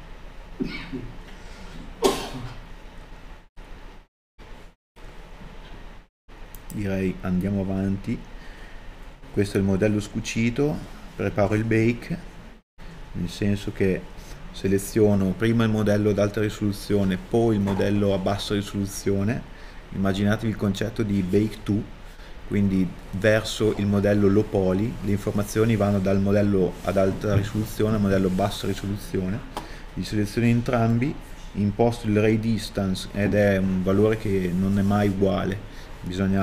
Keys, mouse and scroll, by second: 0.4 z, 0.8 shift+right click, 1.1 ctrl+e, 2.6 middle click, 4.2 alt+shift+right click, 4.3 ctrl+e, 5.1 middle click, 5.6 a, 7.1 shift+click, 9.5 click, 11.0-11.5 scroll down 1, 12.5-15.1 drag.